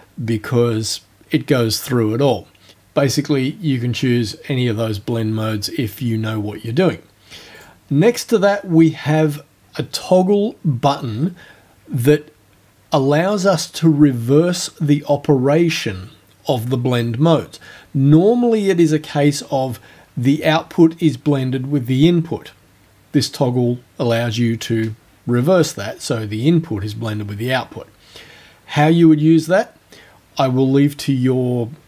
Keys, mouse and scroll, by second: 7.6 click.